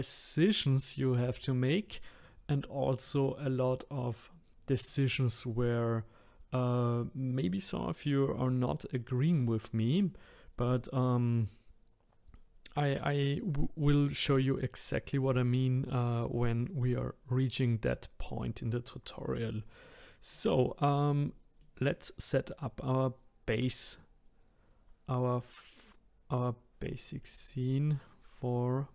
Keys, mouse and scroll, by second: 1.2-3.5 middle drag, 3.5-4.1 scroll up 1, 4.1-7.2 middle drag, 19.8-21.1 middle drag, 21.1-21.6 scroll down 2, 21.6-24.6 middle drag.